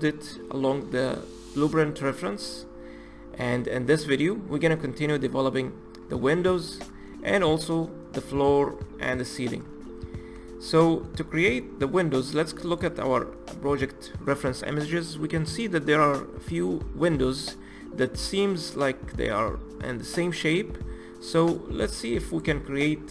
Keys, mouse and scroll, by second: 2.7-5.3 middle drag, 5.3-6.6 scroll up 2, 6.6-7.1 scroll down 1, 7.1-11.3 shift+middle drag, 11.3-12.2 scroll up 2, 22.3 click, 22.6-23.1 scroll up 2.